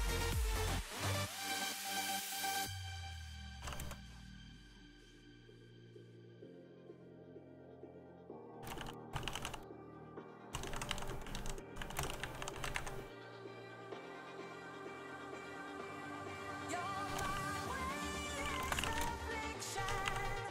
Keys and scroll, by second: 3.1-4.6 typing, 8.1-13.1 typing, 14.6 shift+0, 14.7 Return, 16.6-20.5 typing.